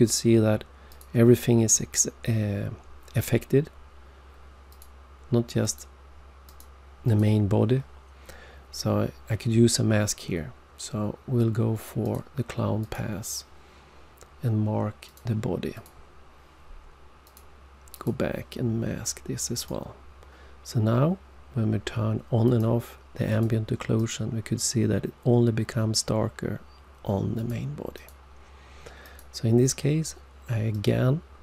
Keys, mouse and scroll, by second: 0.8 click, 4.7 click, 5.6 click, 6.4 click, 12.0 click, 12.7 click, 15.0 click, 15.7 click, 17.2 click, 17.9 click, 19.5 click, 22.4 click, 23.2 click, 23.9 click, 27.3 click, 27.9 click, 29.0 click, 30.7 click.